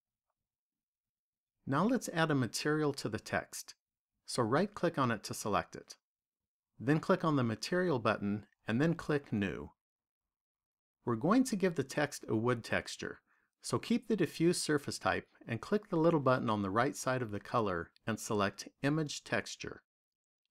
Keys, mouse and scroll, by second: 5.3 right click, 7.9 click, 10.2 click, 16.5 click.